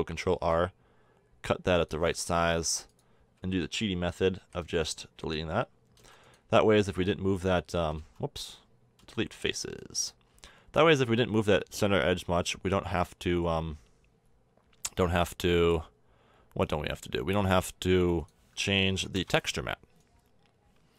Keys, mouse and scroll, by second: 0.0 ctrl+r, 2.9 click, 3.4 a, 4.4 a, 4.6 b, 6.0 x, 7.9 ctrl+z, 9.0 x, 10.3 a, 12.9 Tab, 18.2-20.9 drag.